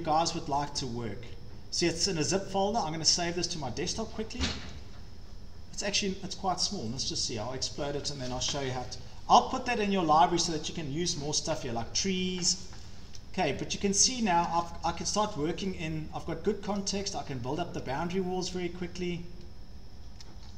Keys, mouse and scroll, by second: 0.7 click, 3.2 click, 7.0 click, 8.3-8.9 scroll down 12, 9.0 scroll up 6, 9.7 scroll up 1, 10.3 click, 10.7 scroll, 11.2-12.8 scroll, 14.5 shift+middle click, 14.6 click, 14.6-15.3 scroll, 16.7 shift+middle click, 17.0-17.8 scroll, 20.1-20.5 shift+scroll, 20.2 click.